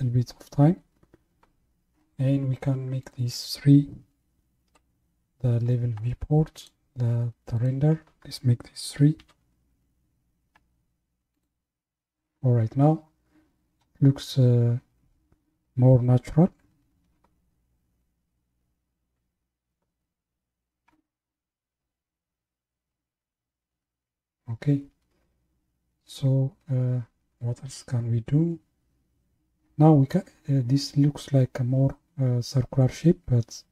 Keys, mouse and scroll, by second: 3.0-6.7 drag, 7.6-10.7 drag.